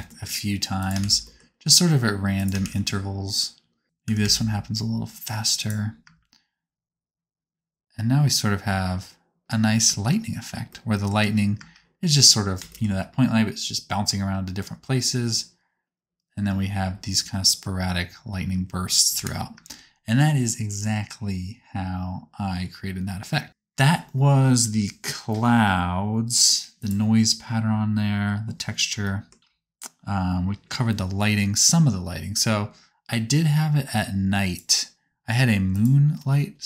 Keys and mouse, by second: 1.0 shift+d, 2.6 shift+d, 3.8 alt+a, 3.8 c, 4.0 s, 6.0 space, 8.4-11.6 middle drag, 11.6 space, 12.2 space, 16.4 space, 16.8 space, 18.4 space, 19.1 KP_0, 19.5 space, 23.5-26.8 drag, 23.5 space, 33.1-34.4 middle drag, 34.4-35.8 drag, 35.8-36.6 middle drag.